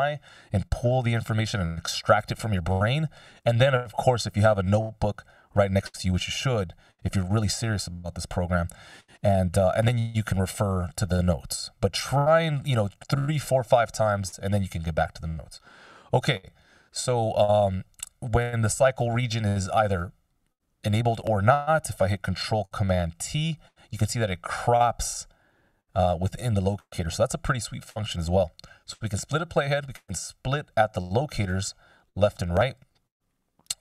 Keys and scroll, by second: 18.8 c, 21.2 c, 23.0 ctrl+super+t, 27.3 super+z, 28.5 F16.